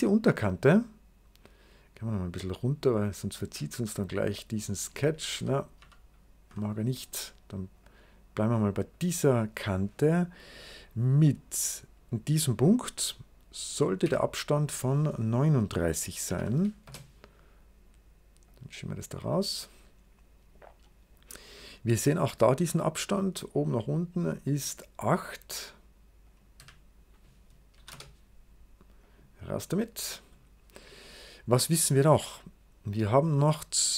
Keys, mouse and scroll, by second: 0.2 click, 1.3-2.5 drag, 3.3-4.8 drag, 5.2 ctrl+z, 5.7 ctrl+z, 7.7 click, 8.8 click, 13.6 click, 13.9 d, 15.9-16.7 typing, 18.3-20.5 drag, 21.9 click, 23.5-25.2 drag, 26.1 click, 26.5 d, 27.7 typing, 27.8 Return, 28.9-30.2 drag.